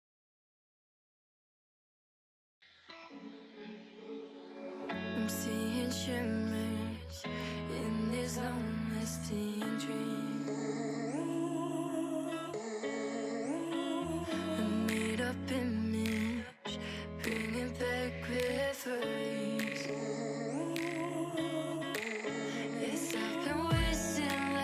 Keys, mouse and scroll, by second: 2.2-3.7 drag, 4.2-5.3 drag, 5.3-5.9 scroll down 2, 5.9-7.4 drag, 7.4-8.5 shift+middle drag, 8.5 click, 10.6 click, 11.0 shift+middle click, 11.2-11.9 scroll up 6, 11.4 Tab, 11.5 shift+middle drag, 11.9 a, 12.8 ,, 14.1 shift+d, 17.3 ,, 19.4 ctrl+z, 19.6 ctrl+z, 20.0 a, 20.4 shift+d, 23.5-24.0 scroll down 2, 24.0 shift+r, 24.3-24.6 shift+middle drag.